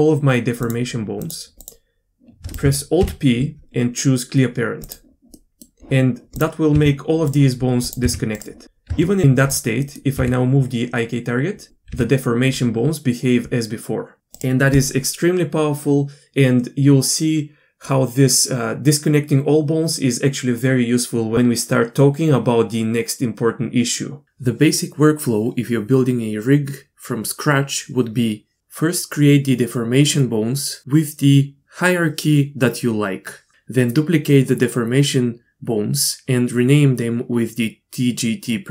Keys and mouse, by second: 1.2-2.4 drag, 3.0 alt+p, 5.4 middle click, 6.7 g, 8.3 g, 8.9 Tab, 10.2 g, 11.9 g.